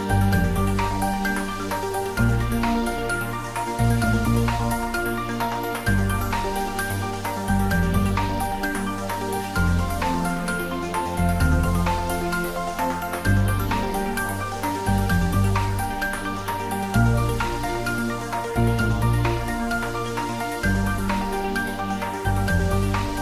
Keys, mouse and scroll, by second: 0.6 8, 1.4 click, 2.3 g, 2.7 y, 5.9 click, 6.3 scroll down 1, 8.8-11.5 shift+drag, 11.5 shift+d, 12.0 r, 13.6-15.5 typing, 14.5 click, 21.1-23.2 drag.